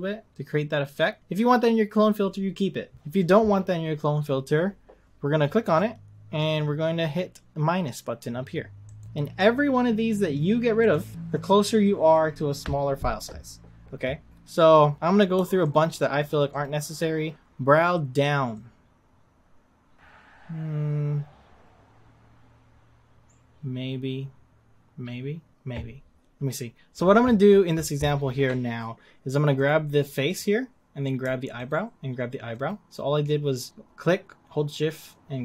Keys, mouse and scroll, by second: 1.2-5.8 drag, 9.0-15.7 drag, 16.5 click, 17.3-19.9 drag, 29.7 click, 30.4 click, 31.6 shift+click, 32.6 shift+click.